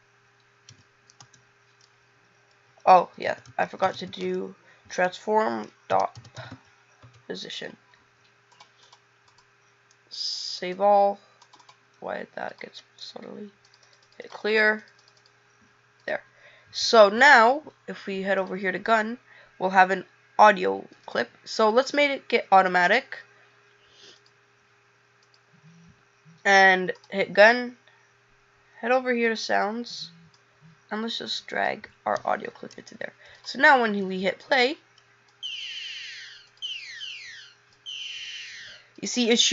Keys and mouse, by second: 22.5 click, 30.3 click.